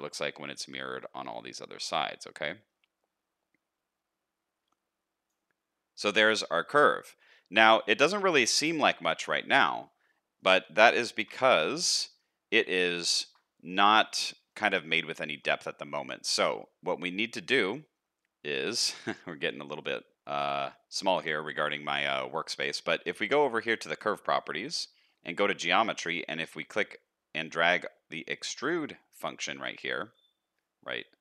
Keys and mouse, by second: 9.8 middle click, 11.1 KP_Decimal, 12.0 middle click, 12.9 shift+middle click, 14.4 shift+middle click, 15.3 shift+middle click, 21.9 shift+middle click, 22.2 middle click.